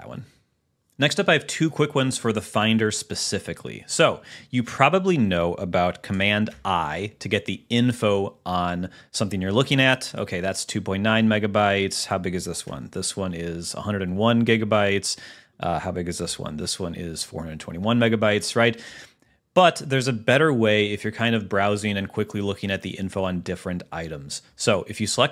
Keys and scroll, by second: 6.8 super+i, 11.4 super+w, 15.0 super+w, 16.6 super+i.